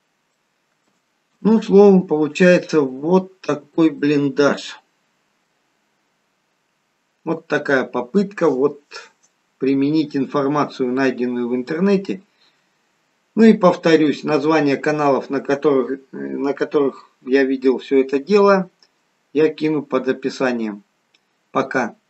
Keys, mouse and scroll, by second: 0.4 middle click, 0.4-1.2 scroll up 1, 1.4 shift+middle click, 2.9 scroll down 1, 4.0 middle click.